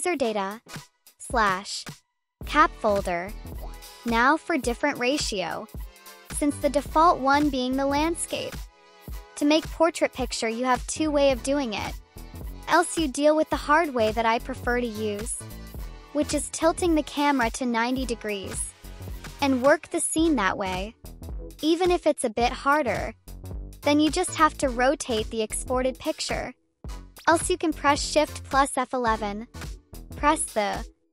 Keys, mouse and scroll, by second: 0.6 click, 2.1 click, 3.9 click, 4.5 right click, 8.1 click, 9.0 space, 9.4-11.1 right drag, 11.4-12.8 drag, 13.1 right click, 14.1 space, 15.4 click, 16.2 click, 16.4 click, 16.5 right click, 16.6 click, 16.8 right click, 16.9 click, 17.1 click, 17.1-20.4 typing, 17.3 click, 17.4 click, 17.5 drag, 17.8 click, 18.4 click, 19.0 click, 19.1 click, 19.2 click, 19.4 click, 19.4 right click, 19.5 click, 19.6 drag, 20.0 click, 20.1 drag, 20.4 click, 20.7 click, 20.8 click, 21.0 click, 21.2 click, 21.5 click, 21.5 right click, 21.6 click, 21.9 click, 22.0 click, 22.1 e, 22.2 click, 22.5 click, 22.5 q, 23.1 click, 23.3 click, 23.5 space, 24.0 click, 24.2 right click, 25.2 click, 25.9 click, 26.2 click, 26.4 click, 26.6 click, 27.9 shift+F11.